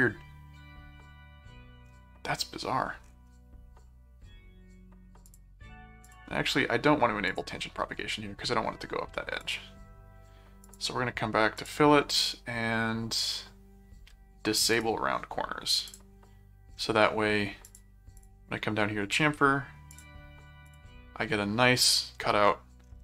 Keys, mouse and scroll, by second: 5.2 click, 6.0 click, 7.2 click, 9.4 click, 10.6 click, 11.6 click, 14.7 click, 15.9 click, 17.7 click, 19.9 click, 20.7 click.